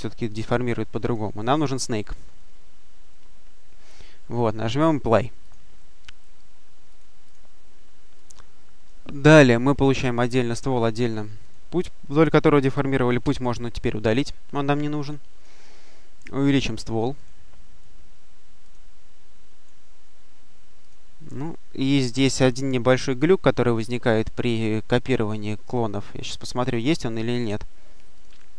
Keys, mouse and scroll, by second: 0.9 click, 5.3 click, 6.8-7.6 drag, 8.0 click, 11.3 click, 13.1 Delete, 15.0 click, 17.0 click, 18.5 click, 20.7 click, 26.3 click, 27.2 click, 28.0 click.